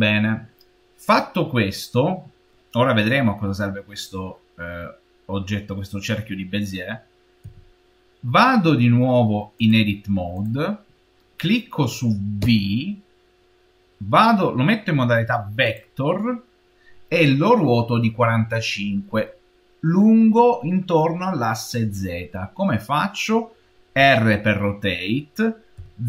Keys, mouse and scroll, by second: 7.3 v, 9.4 click, 12.3 v, 23.8 r.